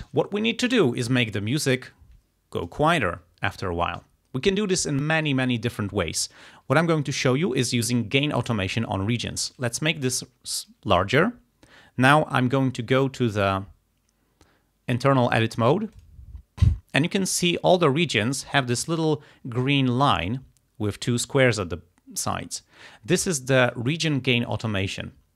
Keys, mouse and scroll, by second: 1.7 click, 9.5-11.0 drag, 16.0 click.